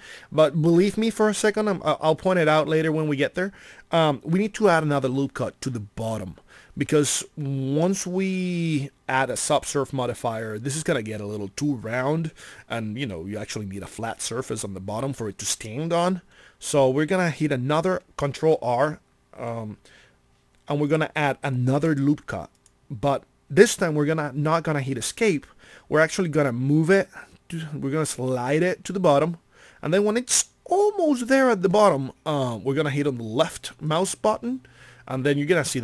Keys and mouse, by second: 21.7 ctrl+r, 33.9 click.